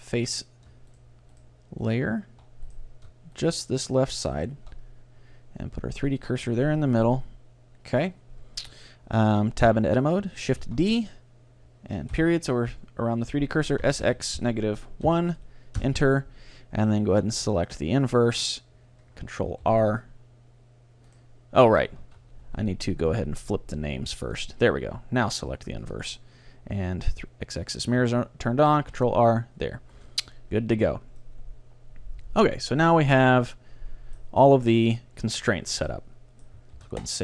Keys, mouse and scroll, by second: 1.0 right click, 1.4-6.3 right drag, 6.1-8.9 drag, 9.7 Tab, 10.7 shift+d, 11.1-13.0 drag, 12.2 ., 13.9 s, 18.5-19.5 drag, 19.7 ctrl+r, 21.2-23.0 right drag, 22.1 ctrl+z, 24.4 click, 26.0-27.2 drag, 28.5 ctrl+r, 29.4-31.3 drag, 30.0 a, 30.9 Tab, 31.3-33.2 middle drag, 34.7-36.3 middle drag, 36.8 ctrl+s.